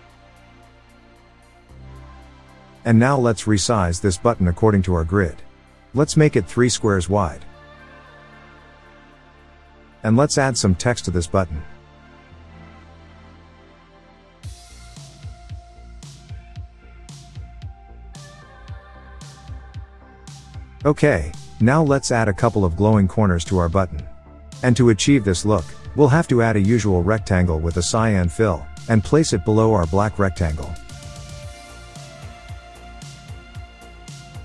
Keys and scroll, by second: 15.2-18.3 typing, 16.4 Return, 34.3 super+a.